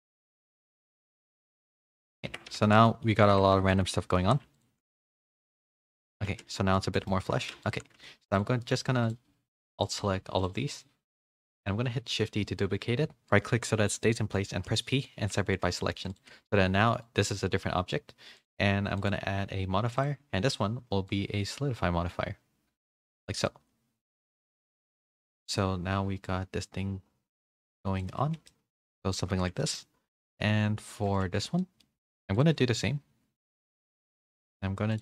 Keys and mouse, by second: 0.6 g, 2.3 Tab, 2.5 a, 2.6 a, 2.8 middle click, 3.3 Tab, 3.7 shift+middle drag, 4.0 middle click, 4.2 3, 4.5 alt+click, 4.9 s, 6.2 z, 6.5 middle click, 6.7 click, 6.9 shift+middle click, 7.3 3, 9.7 alt+shift+click, 10.4-11.5 alt+shift+drag, 11.9 shift+d, 14.5 p, 15.2 Tab, 15.4 a, 15.6 a, 15.8 middle click, 16.3 g, 19.3-20.0 drag, 21.1-23.0 shift+drag, 23.4 a, 23.4-24.5 middle drag, 24.9 middle click, 26.4-28.0 shift+drag, 28.2 a, 28.3 a, 28.4-29.1 middle drag, 29.3 a, 29.6 shift+middle drag, 30.1 click, 30.4 g, 31.2 Tab, 31.6 middle click, 31.9 3, 33.4 alt+shift+click, 34.3-35.0 alt+shift+drag.